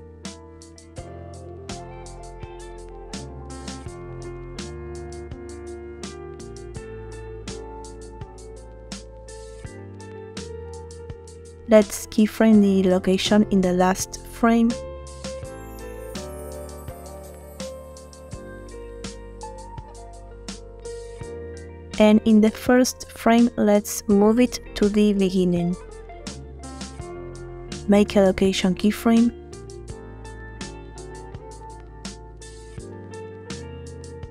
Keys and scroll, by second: 8.3 Tab, 11.5 i, 31.9 space.